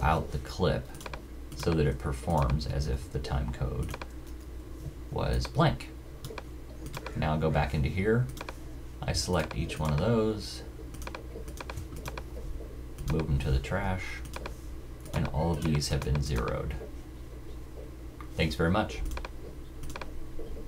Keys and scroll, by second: 0.0 super+j, 2.9 super+w.